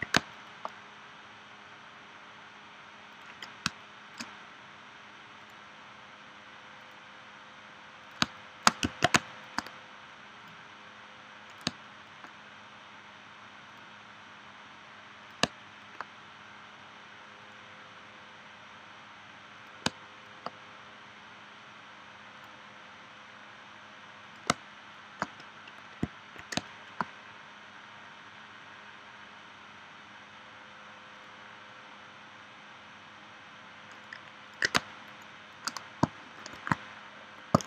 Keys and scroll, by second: 0.1 space, 3.7 space, 8.2 space, 9.1 space, 11.7 space, 15.4 space, 19.9 space, 24.5 space, 26.5 space, 34.7 space, 36.5 shift+v.